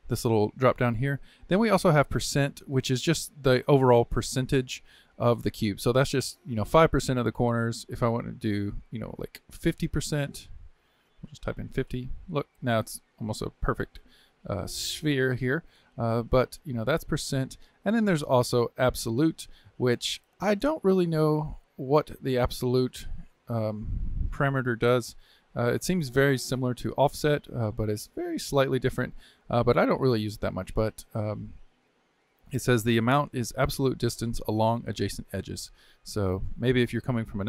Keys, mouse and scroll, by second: 0.7-3.7 drag, 7.7-10.8 drag, 11.0-13.0 drag, 13.0-16.2 middle drag, 16.2-23.9 drag, 26.2-32.2 drag.